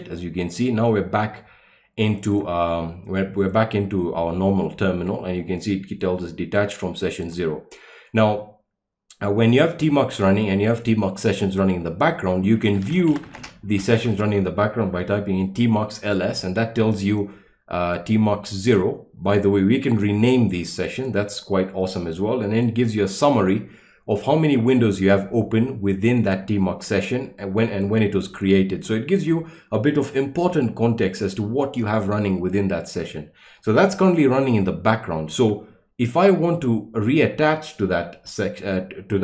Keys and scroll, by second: 12.5-14.4 typing.